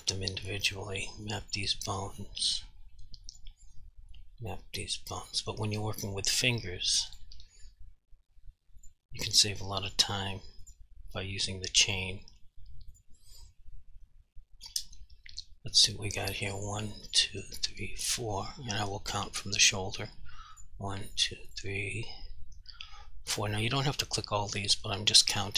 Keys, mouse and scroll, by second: 16.6 click, 17.6 double click, 18.1 click, 20.6 click, 21.5 double click, 23.4 click.